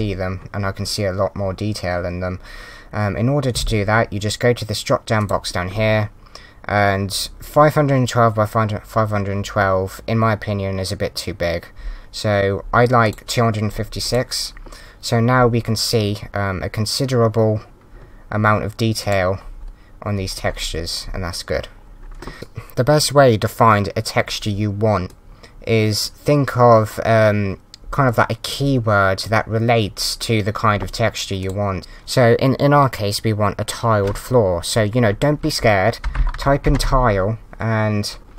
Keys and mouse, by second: 5.2 click, 13.0 click, 19.0 click, 25.1 click, 31.4 click.